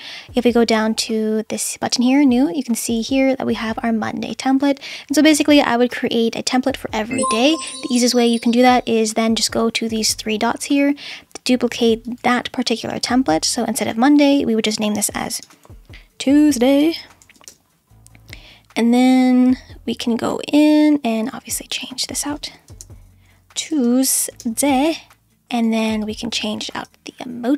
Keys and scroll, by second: 15.4-18.0 typing, 22.4-24.9 typing.